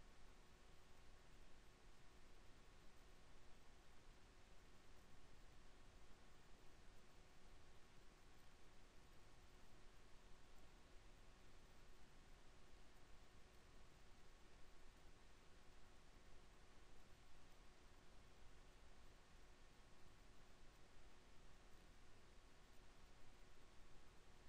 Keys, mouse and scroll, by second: 5.3 Tab, 13.5 Tab, 14.1 Tab, 18.1 KP_0, 20.3 s.